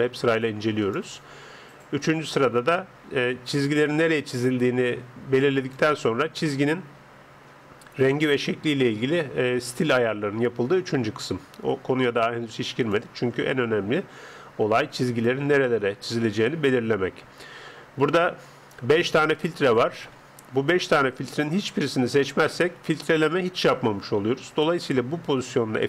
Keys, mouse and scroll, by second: 0.8 click, 5.6 click, 12.8 click, 15.0 click, 19.0-22.0 drag.